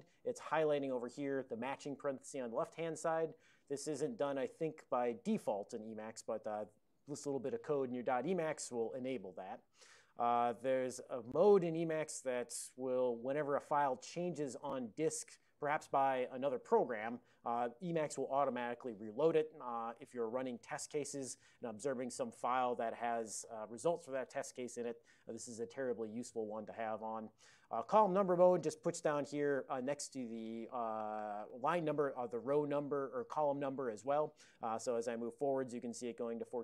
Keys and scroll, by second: 35.4 ctrl+f, 35.7 ctrl+f, 36.1 ctrl+f.